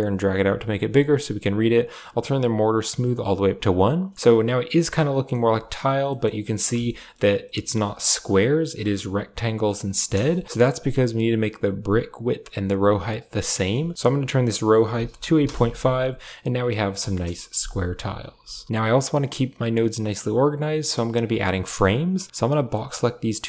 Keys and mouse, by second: 2.1 click, 4.1-5.1 middle drag, 6.0 middle click, 6.8 middle click, 7.3 middle click, 8.5 middle click, 9.9 KP_0, 10.6 middle click, 13.4-15.3 drag, 16.2-16.5 middle drag, 17.0 KP_0, 18.0 a, 18.2 a, 18.4 g, 21.1 click, 22.6-23.4 drag.